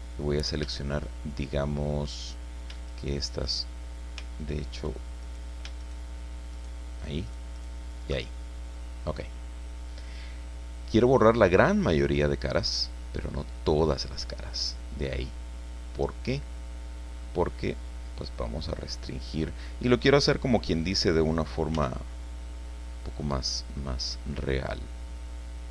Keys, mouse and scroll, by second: 0.8-2.0 shift+middle drag, 2.9 shift+right click, 3.4 shift+right click, 5.2 alt+shift+right click, 5.8 alt+shift+right click, 6.5 alt+shift+right click, 7.2 alt+shift+right click, 7.6 alt+shift+right click, 8.3-8.7 alt+shift+scroll down 3, 8.7 click, 8.8-11.5 middle drag, 11.8 scroll up 1, 13.2 click, 13.9-14.3 scroll up 1, 14.5 click, 14.6 middle click, 15.5-17.4 drag, 21.7 c, 23.7-25.7 drag.